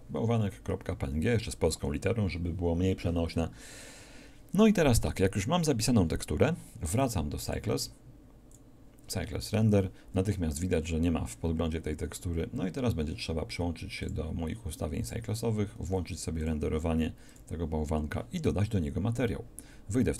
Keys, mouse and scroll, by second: 0.0 Return, 8.5-11.7 drag, 14.1-18.1 drag.